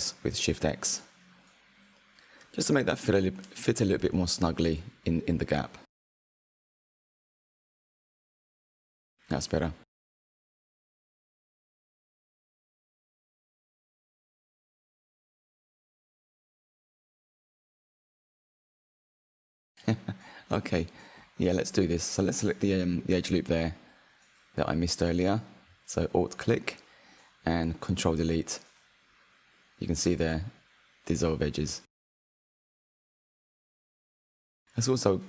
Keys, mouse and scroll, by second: 0.6 middle click, 1.5 s, 6.4 Tab, 7.4 click, 7.9-8.7 scroll down 4, 8.7-10.0 middle drag, 10.0 scroll down 2, 10.2 scroll up 1, 10.3-11.5 middle drag, 11.5-12.0 scroll down 4, 12.0-15.8 shift+middle drag, 19.9 click, 21.2 Tab, 22.0-23.2 middle drag, 23.2 click, 25.3 click, 29.3 Delete, 32.4 click, 32.8-34.1 middle drag.